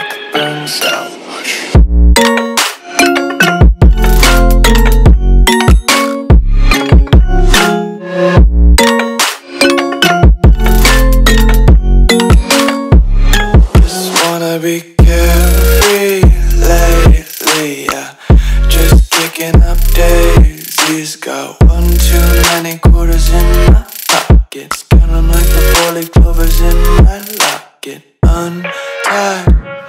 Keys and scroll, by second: 0.7 space, 3.5 super+space, 6.5 a, 10.5-11.3 typing, 14.9-15.5 typing, 19.3 Delete, 20.9-23.8 typing, 24.8 a, 26.2 i, 28.1 g.